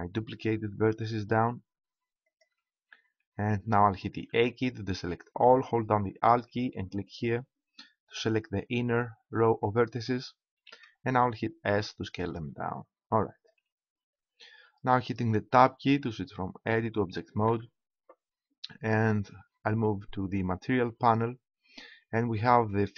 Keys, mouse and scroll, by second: 2.6-4.2 drag, 4.3 a, 7.0-8.9 right drag, 10.6 s, 13.0 click, 14.0 click, 17.5 Tab.